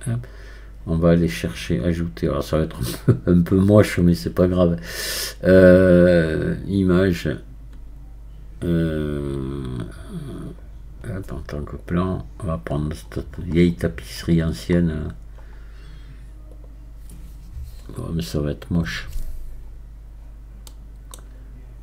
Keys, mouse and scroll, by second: 0.3-1.9 scroll down 2, 1.9-19.7 drag, 19.7-20.7 scroll down 6, 20.7-21.8 middle drag.